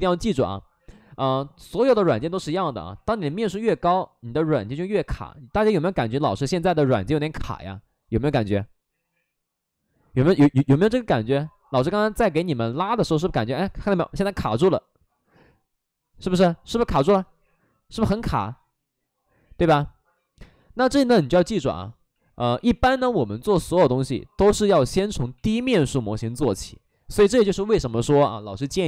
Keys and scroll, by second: 20.9 ctrl+z, 21.5 ctrl+z, 22.0 ctrl+z, 22.5 ctrl+z, 22.9 ctrl+z, 26.6 shift+f, 27.1 shift+f.